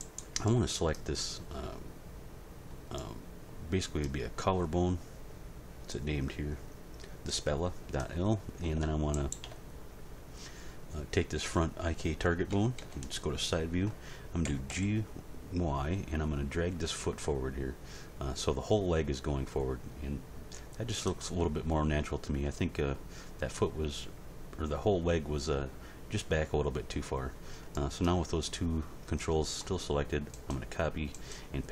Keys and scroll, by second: 12.5 End, 12.8 Page_Down, 14.5 g, 14.7 y.